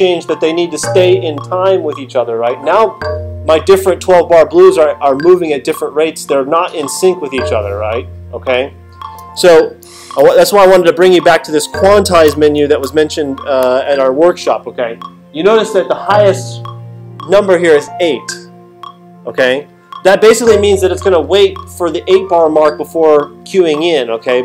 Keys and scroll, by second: 9.8 alt+super+8, 12.3 alt+super+8.